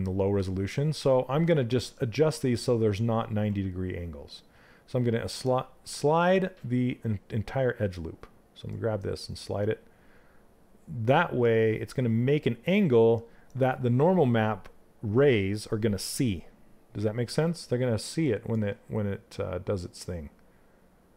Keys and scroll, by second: 2.9 space.